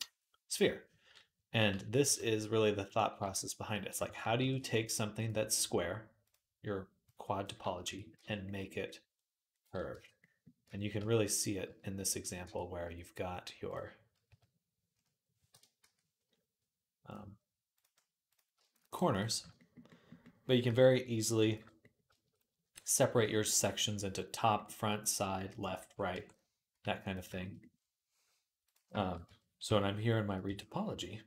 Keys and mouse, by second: 1.8 q, 3.1 Tab, 5.0 middle click, 6.0-17.6 alt+shift+drag, 7.7 Tab, 7.9 z, 9.7 Tab, 10.5 Tab, 10.8 z, 11.4 z, 12.2 Tab, 14.1 z, 15.6 q, 17.6 middle click, 18.1 click, 18.2 shift+middle click, 18.6 shift+a, 18.7 click, 19.0-28.4 middle drag, 20.5 shift+a, 22.7 shift+a, 26.0 Tab, 26.6 x, 28.4 click, 28.5-31.2 shift+middle drag, 29.1 Tab, 29.4 q, 30.2 q.